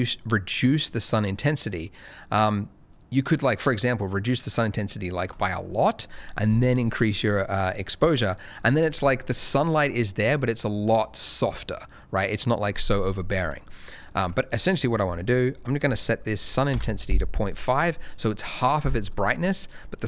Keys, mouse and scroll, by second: 6.0 click, 6.3 middle click, 7.5 click, 13.4 click, 16.3 ., 16.7 Return, 19.4 shift+middle click.